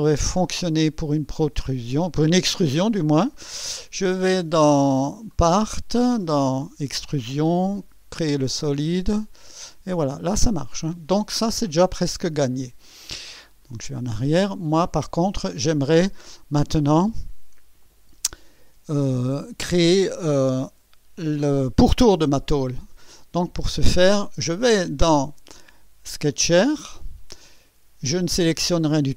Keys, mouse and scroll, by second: 0.2 scroll up 2, 0.8-1.5 right drag, 3.2 click, 4.7 click, 5.3 click, 6.4 click, 9.1 click, 13.5 click, 14.4 scroll down 1, 17.8 click, 18.2 space, 19.0 space, 20.1 scroll down 2, 23.2 click, 25.1 click, 26.3 click.